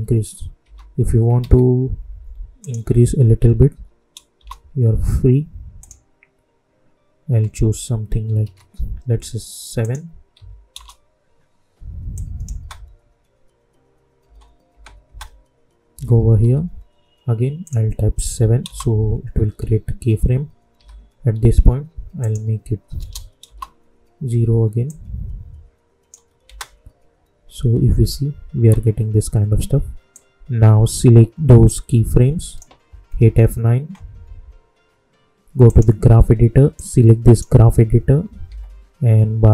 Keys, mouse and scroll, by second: 0.6 j, 1.3 ctrl+a, 2.6 click, 4.3 Return, 5.7 click, 8.4 ctrl+a, 9.8 click, 10.7 Return, 12.1 click, 12.5 space, 15.9 typing, 17.6 click, 18.6 Return, 22.1 click, 23.4 Return, 24.8-26.4 drag, 26.4 space, 28.5 space, 30.1-33.1 drag, 33.1 F9, 33.9 F9, 35.6-38.2 drag, 38.2 =.